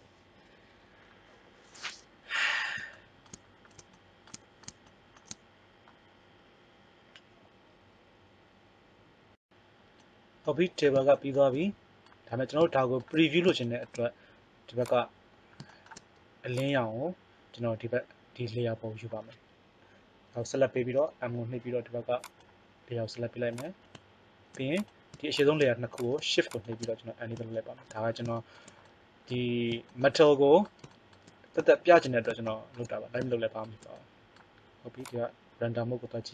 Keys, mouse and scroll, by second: 12.8 middle click, 13.6 middle click, 14.7 click, 15.4 middle click, 15.6-20.9 right drag, 20.9 m, 23.4 click, 25.3-28.3 middle drag, 31.2 middle click, 31.7 middle click, 33.5 middle click.